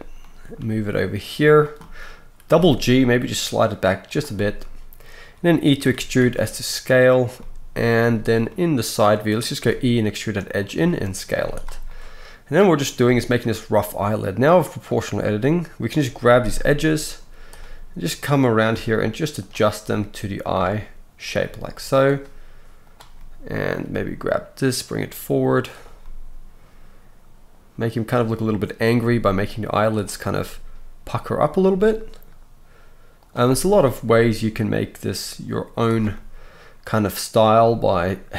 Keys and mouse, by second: 0.6 g, 2.5 g, 5.8 e, 8.0 z, 9.6 e, 10.8 s, 11.3 z, 14.7 click, 14.7 middle click, 16.6 g, 18.5 middle click, 18.6-20.4 right drag, 18.7 g, 20.4-21.3 middle drag, 21.3-22.8 right drag, 21.4 g, 22.8 middle click, 22.9-26.9 right drag, 23.8 g, 26.9-28.0 drag, 28.0-29.0 middle drag, 29.0-33.3 drag, 29.0 g, 30.4 g, 33.2 middle click, 33.2 right click, 33.4-38.3 right drag, 34.1 g, 37.6 g.